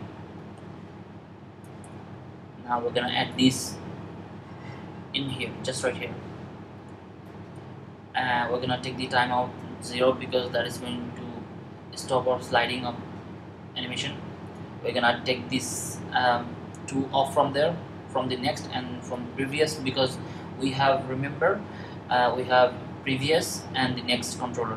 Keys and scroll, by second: 5.2 super+v.